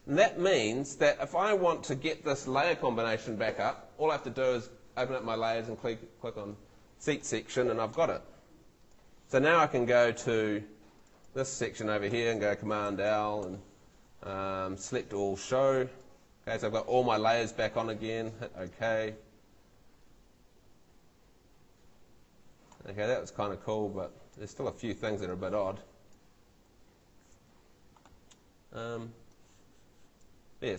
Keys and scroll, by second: 12.9 super+l.